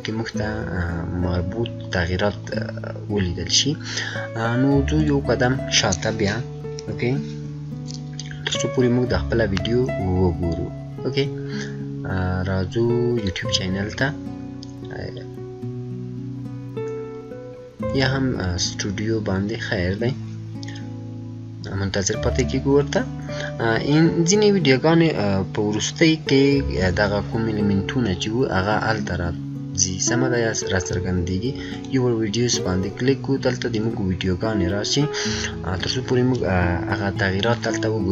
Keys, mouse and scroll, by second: 2.4 scroll down 1, 2.4 scroll up 1, 4.9 click, 8.0-9.1 scroll up 2, 10.3 scroll up 1, 13.1 scroll up 1, 13.1 click, 17.9 click, 31.7 click, 31.7 click.